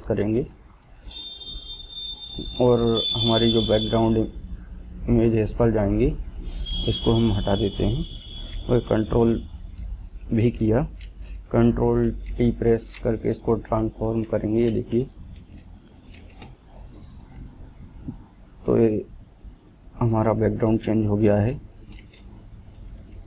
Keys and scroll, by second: 9.2 ctrl+v, 12.2 ctrl+t.